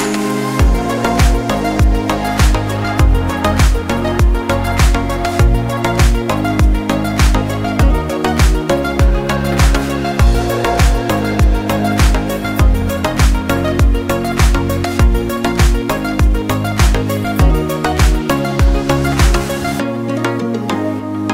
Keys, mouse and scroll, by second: 1.2 scroll up 1, 2.2 click, 9.0 right click, 10.1 click, 12.5 scroll down 1, 13.4 click, 14.9 scroll down 1, 16.1 click, 19.6 scroll up 1, 20.1 click.